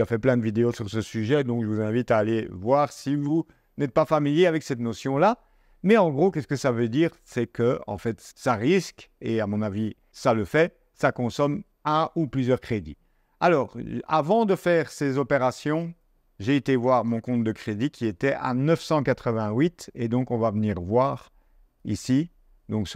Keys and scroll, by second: 19.0 super+Tab.